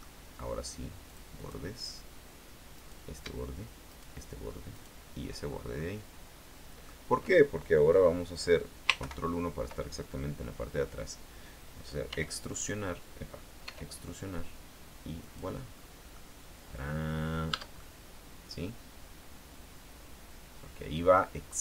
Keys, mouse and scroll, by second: 1.2 click, 2.9 right click, 4.0 shift+right click, 4.9 shift+right click, 5.6 shift+scroll down 1, 5.9-7.2 middle drag, 9.2 ctrl+KP_1, 12.2 e, 13.8 e, 15.4 click, 15.8-16.2 scroll down 2, 16.3-17.8 middle drag, 17.6 Tab, 17.9-21.6 middle drag.